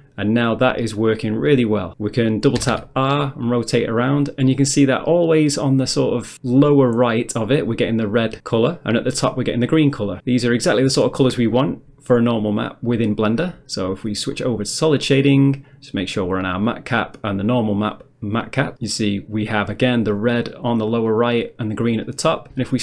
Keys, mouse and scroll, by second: 2.6 r, 2.8 r, 9.7 right click, 14.4 click, 15.7 click, 16.6 click, 17.5 click.